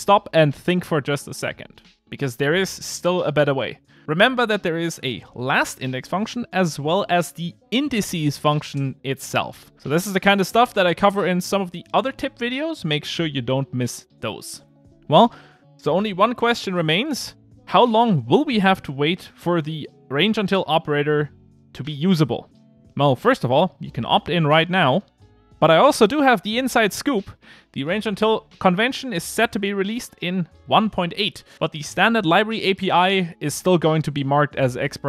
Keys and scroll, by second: 6.7 alt+shift+Left.